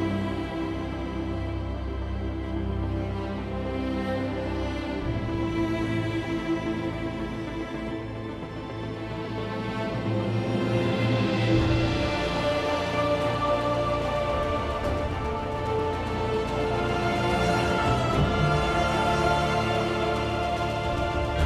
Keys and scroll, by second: 0.6-1.1 typing, 2.3 r, 13.7 r, 16.8 r, 18.4 r, 19.9 r.